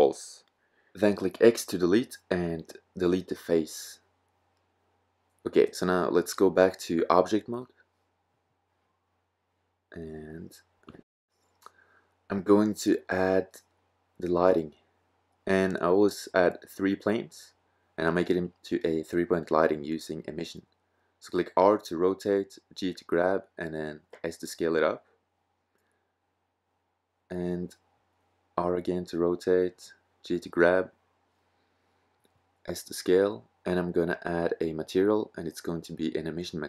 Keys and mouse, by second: 1.2 x, 17.3-18.1 middle drag, 18.9 r, 22.0 g, 23.9 s, 27.4 r, 29.0 g, 31.6 s.